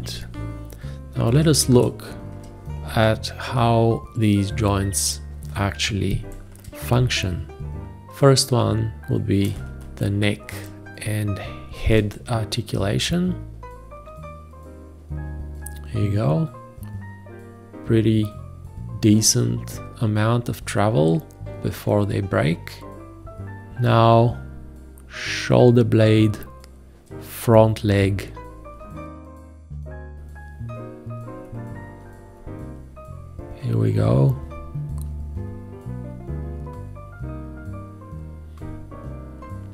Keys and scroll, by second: 0.7 space, 6.2 g, 9.5 space.